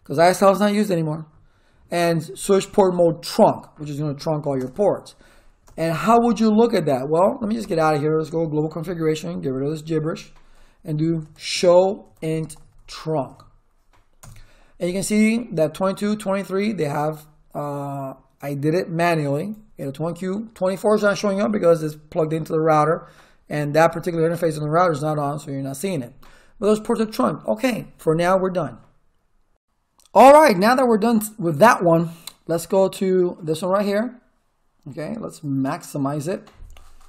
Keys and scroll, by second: 4.6 space, 5.6 Return, 7.6 ctrl+z, 8.3 Return, 10.8-13.8 typing, 14.2 Return.